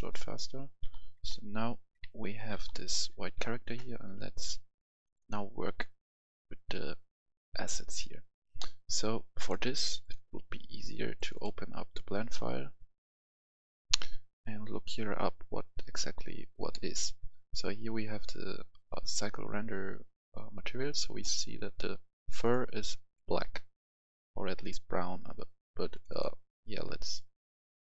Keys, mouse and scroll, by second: 0.1-3.3 right drag, 0.4-2.9 typing, 5.0-27.8 drag.